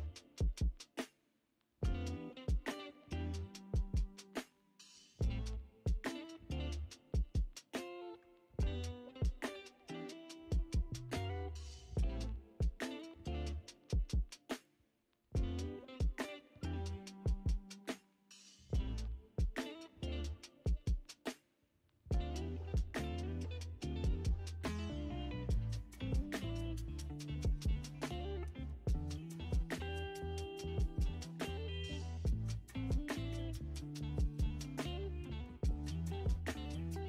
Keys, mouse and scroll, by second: 7.9 click, 8.6 g, 25.4 click, 26.0 g, 29.6 click, 30.5 shift+click, 30.9 g, 34.0 click, 34.4 g.